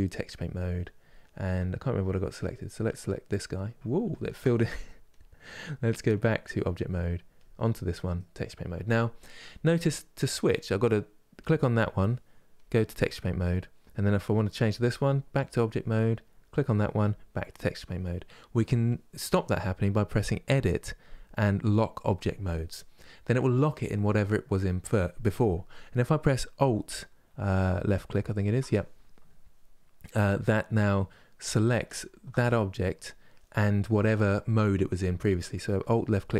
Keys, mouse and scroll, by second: 0.0 click, 0.8-2.2 shift+middle drag, 2.2-3.7 drag, 3.7 ctrl+z, 4.8 click, 5.8-7.1 drag, 7.6-11.1 middle drag, 11.1 click, 12.9-15.9 drag, 27.6 alt+click, 31.6 alt+click.